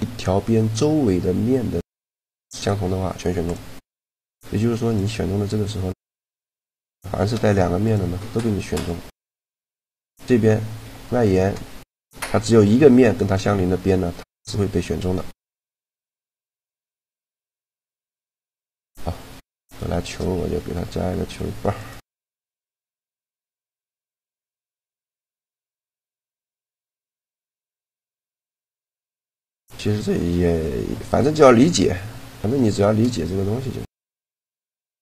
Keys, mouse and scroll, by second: 3.7 middle click, 4.5-5.7 drag, 4.5-6.3 right drag, 6.7 shift+g, 10.6 middle click, 11.9-15.7 middle drag, 16.5 a, 19.7 shift+a, 22.5-24.3 drag, 23.1 s, 24.1 s, 24.9-26.4 drag, 26.4 right click, 26.9 s, 31.3-34.2 middle drag, 33.2 a, 34.2 l.